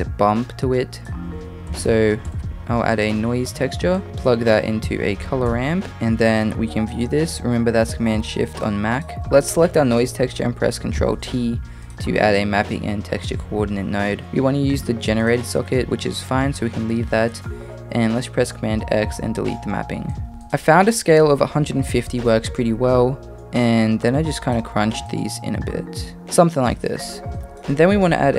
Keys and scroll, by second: 1.4 shift+a, 11.0 ctrl+t, 19.0 super+x.